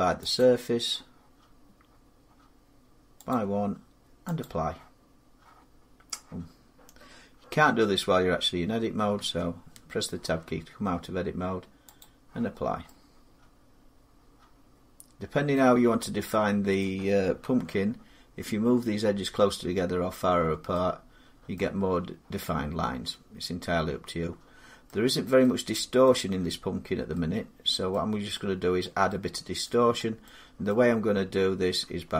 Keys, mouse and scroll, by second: 0.1 click, 3.1 click, 4.2 click, 8.9 Tab, 11.8 click, 12.4 middle click, 15.2 scroll down 4, 15.3 middle click, 15.6-16.1 scroll up 2, 16.6 middle click, 17.2 Tab, 20.1 Tab, 20.1 scroll down 2, 21.3 middle click, 24.6 middle click, 25.7 scroll up 1, 25.8 middle click, 26.6 scroll up 1, 27.6 scroll down 2, 28.3 scroll up 2, 28.6 middle click, 28.8 scroll down 3, 29.4 middle click, 29.6 middle click, 29.7 middle click, 30.0-30.5 scroll down 3, 30.5-31.6 scroll, 31.6 Tab.